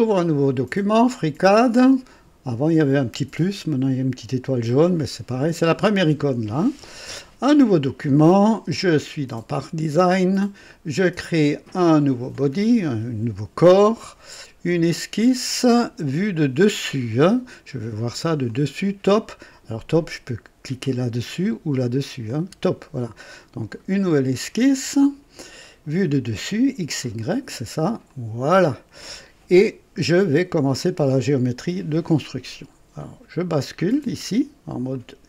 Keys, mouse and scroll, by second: 0.7 click, 11.9 click, 17.4 click, 18.5 click, 20.8 click, 22.2 click, 24.8 click, 27.1 click, 28.1 click, 34.9 click.